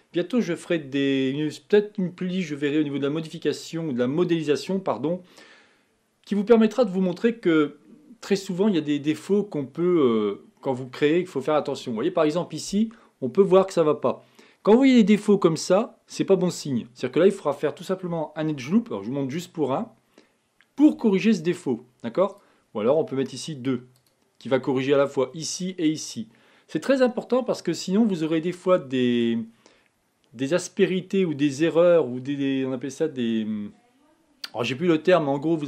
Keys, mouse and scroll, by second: 10.1-11.1 middle drag, 11.1-12.9 scroll up 4, 18.8 ctrl+r, 24.0 click, 28.2-28.8 scroll down 3, 28.8-31.8 middle drag.